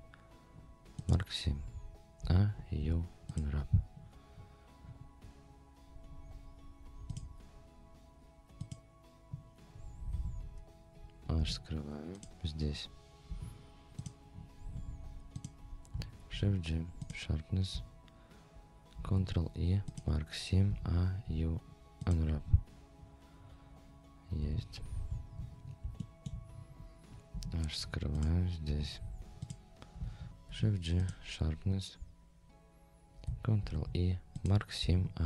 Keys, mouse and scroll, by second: 2.2 a, 2.8 u, 4.3-4.8 scroll up 2, 7.1-8.7 drag, 9.7-10.1 scroll down 2, 10.1 Tab, 10.5 scroll up 1, 11.4 h, 11.8 scroll up 2, 12.1 click, 13.3 Tab, 14.0 click, 14.3-14.9 scroll up 4, 15.4 click, 16.3 shift+g, 19.0 ctrl+e, 20.7 a, 21.2 u, 23.4-23.7 scroll down 2, 24.4 Tab, 24.7-25.8 scroll down 7, 26.0 shift+middle drag, 26.5-27.3 scroll down 2, 27.3 h, 27.8 scroll up 2, 28.1 click, 28.4 scroll up 1, 28.7 Tab, 29.0-29.3 scroll up 2, 29.4 click, 30.5 shift+g, 33.6 ctrl+e, 34.8 a.